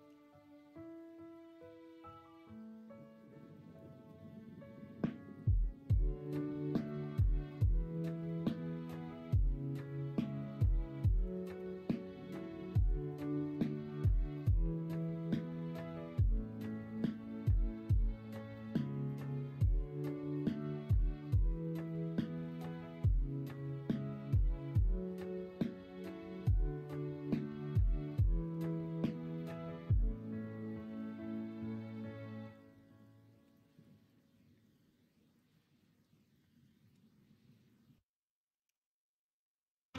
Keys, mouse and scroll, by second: 0.0 e, 3.9 ctrl+z, 6.9 l, 8.2 shift+d, 10.5 s, 11.5 g, 13.2 s, 14.9 g, 18.6 s, 19.7 g, 26.9 shift+right click, 26.9 shift+middle click, 30.9 3, 33.4 2, 36.8 x, 38.6 x.